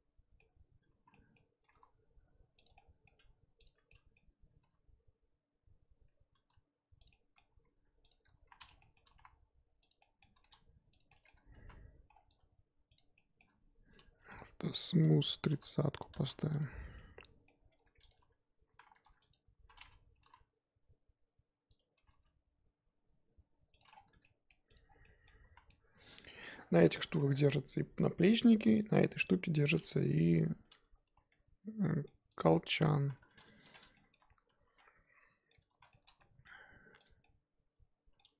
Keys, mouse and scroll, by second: 1.6 g, 2.7-3.6 middle drag, 3.6 click, 3.9 middle click, 4.6 g, 7.1-7.5 middle drag, 7.5 z, 8.1 shift+click, 8.4 z, 8.8 middle click, 9.0 g, 10.0 middle click, 10.4 g, 11.1 middle drag, 11.3 Tab, 11.7 z, 12.1 scroll down 4, 12.3-13.1 right drag, 13.1-16.1 middle drag, 16.1 click, 16.9-17.6 middle drag, 17.6-18.1 scroll up 2, 18.1 click, 18.2 Tab, 18.3-18.7 scroll up 2, 18.7 z, 19.3 click, 19.6 z, 20.2 g, 21.9 g, 23.9 scroll down 3, 24.1 Tab, 24.2-24.7 middle drag, 24.7 click, 25.0-25.5 middle drag, 25.5 z, 25.7-26.9 middle drag, 26.9 scroll up 2, 27.1-29.6 middle drag, 29.6 click, 29.7-30.3 middle drag, 30.3 scroll up 1, 30.5 Tab, 30.7 z, 31.3-32.4 middle drag, 32.4 click, 33.0 z, 33.2 Tab, 33.6 shift+h, 33.9 middle drag, 34.2 Tab, 34.7 z, 34.8-35.7 middle drag, 35.7 z, 35.9-36.5 shift+middle drag, 36.5-37.0 scroll up 2, 37.0 click, 37.2-38.3 middle drag.